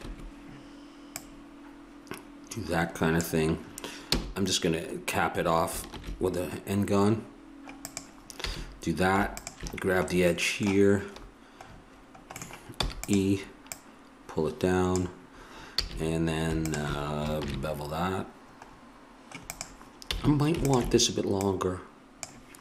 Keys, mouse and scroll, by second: 1.1-2.7 drag, 4.1 f, 5.9 ctrl+b, 8.4 a, 9.4-11.3 drag, 10.3 middle click, 11.9 middle click, 12.0 middle click, 12.5 middle click, 12.7 e, 13.7-15.8 drag, 15.8 a, 16.7 click, 17.4 ctrl+b, 20.1 a, 20.7-22.6 drag.